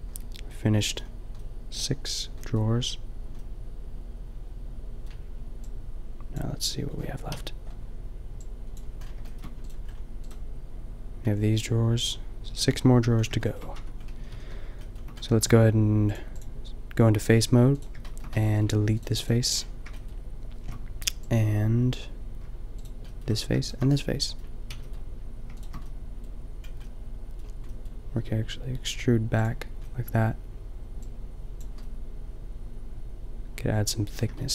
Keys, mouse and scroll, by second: 5.6-6.2 drag, 7.3 KP_5, 9.3-9.8 middle drag, 13.8 Tab, 14.3 a, 14.3 a, 14.5 a, 14.9 middle click, 16.1-17.2 middle drag, 17.2 a, 18.0-19.9 middle drag, 23.1-24.5 middle drag, 24.7 b, 27.3 click, 28.2 e, 29.5-30.9 drag, 33.2 middle click.